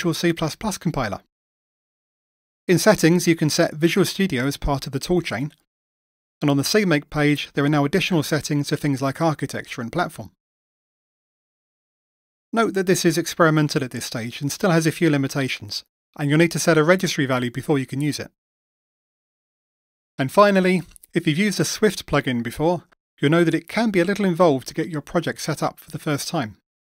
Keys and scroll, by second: 11.8 ctrl+alt+s, 13.1 shift+F10.